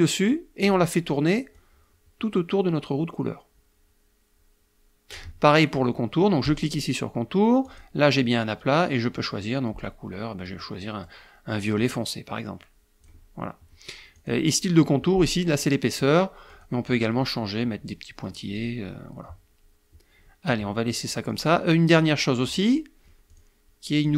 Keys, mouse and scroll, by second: 1.5-5.2 drag, 6.3 click, 7.5 click, 10.3 click, 11.7-13.1 drag, 14.0 click, 16.4 click, 18.4 click, 20.3-21.4 middle drag, 23.1 click, 23.8 click.